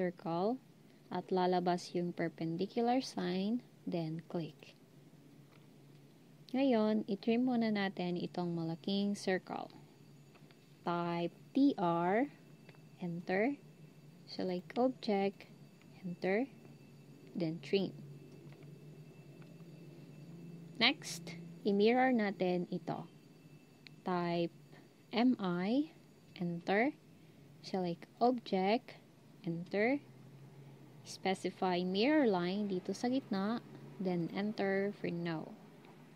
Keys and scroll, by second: 11.3-12.0 typing, 16.0 Return, 25.0-25.7 typing, 29.4 Return.